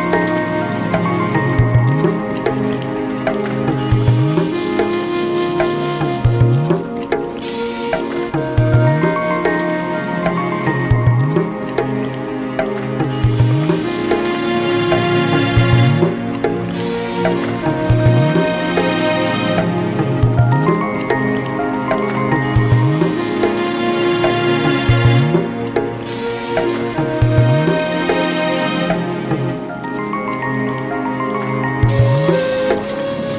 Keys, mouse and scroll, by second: 0.0 shift+click, 0.1 ctrl+j, 0.2 ctrl+j, 0.4 q, 0.5 scroll, 0.8 click, 0.9 ctrl+j, 1.0 ctrl+j, 1.1 q, 1.2 alt+middle click, 1.3 middle click, 1.4 click, 1.6 ctrl+j, 1.7 ctrl+j, 1.7 q, 1.8 click, 1.8 middle click, 1.9 middle click, 2.0 middle click, 2.4 middle click, 2.6 click, 2.8 click, 2.9 middle click, 3.0-4.0 typing, 3.2 click, 3.4 click, 3.6 scroll, 3.9 click, 4.1 click, 4.3 alt+scroll, 4.8 click, 4.8 alt+middle click, 4.9 alt+middle click, 5.0 click, 5.1 click, 5.3 click, 5.4 click, 5.4 middle click, 6.0-7.3 typing, 6.1 click, 6.5 click, 6.8 alt+middle click, 6.9 click, 7.0 click, 7.5 scroll, 7.7 click, 8.0 scroll, 8.2 alt+middle click, 8.4 click, 8.5 alt+middle click, 8.6 click, 8.7 click, 8.7 alt+middle click, 8.8 alt+middle click, 9.1 click, 9.2 alt+middle click, 9.3 click, 9.6 click, 9.7 typing, 9.8 Return, 10.1 click, 10.4 click, 10.6 click, 10.8 middle click, 10.9-11.6 typing, 11.0 click, 11.1 click, 11.5 click, 11.6 alt+middle click, 11.6 scroll, 11.7 alt+middle click, 11.9 click, 12.2 middle click, 12.8 click, 12.9 alt+middle click, 13.0 click, 13.4 alt+middle click, 13.6 click, 13.7 click, 13.9 Return, 14.1 click, 14.2 click, 14.5 click, 14.9-16.0 scroll, 15.1 click, 15.4 alt+middle click, 15.5 click, 15.6 click, 15.8 alt+q, 16.7 click, 16.9 alt+scroll, 17.0 click, 17.3 click, 17.6 ctrl+j, 17.6 click, 17.7 ctrl+k, 17.8 click, 17.9-18.2 scroll, 18.3 click, 18.4-19.2 typing, 18.4 click, 18.7-19.1 scroll, 19.2 click, 19.4 alt+middle click, 19.7 click, 19.9 alt+middle click, 20.0 alt+middle click, 20.0-20.6 scroll, 20.1 click, 20.5 middle click, 20.7 middle click, 20.9 click, 21.0 ctrl+k, 21.0 middle click, 21.1 click, 21.2 middle click, 21.2 scroll, 21.3 middle click, 21.4-23.7 typing, 21.5 click, 21.5 click, 21.7 click, 21.8 scroll, 22.1 click, 22.3 ctrl+j, 22.4 click, 22.6 ctrl+j, 22.6 scroll, 22.8 middle click, 22.9 alt+middle click, 23.0 click, 23.2 click, 23.5 alt+middle click, 23.7 click, 24.1 click, 24.1 alt+middle click, 24.5 click, 24.5 click, 24.7 alt+middle click, 24.9 click, 25.1 middle click, 25.3 click, 25.5 click, 25.8 Return, 26.1 click, 26.2 click, 26.4 click, 26.7 middle click, 27.4 alt+middle click, 29.3 alt+middle click, 30.7 click, 31.7 middle click, 33.2 alt+middle click.